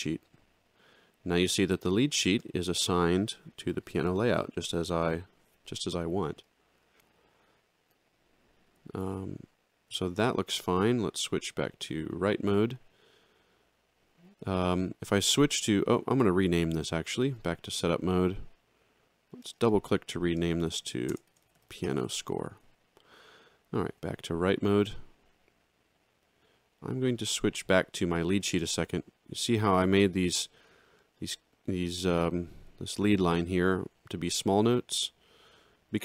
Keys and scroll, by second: 11.9 ctrl+2, 20.5-21.6 typing, 21.8 Return, 23.9 ctrl+2, 28.4 alt+shift+[.